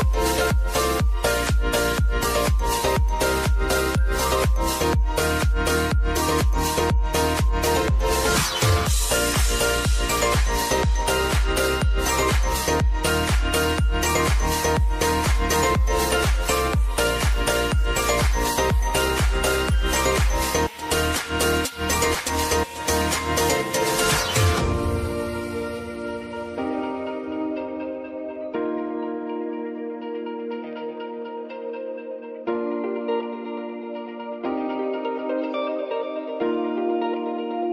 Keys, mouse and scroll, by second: 2.5 click, 2.9 F9, 3.9 click, 4.9 space, 7.3 ctrl+click, 8.8 ctrl+click, 9.9 space, 12.4 space, 13.6 alt+click, 14.3-15.5 typing, 15.8 Down, 16.3 Return, 17.6 click, 18.0 space, 20.1 space, 20.9 click, 22.4 space, 27.6 space, 28.7 click, 29.1 space, 31.9 space, 33.0 click, 33.3 space, 35.2 click, 37.1 p.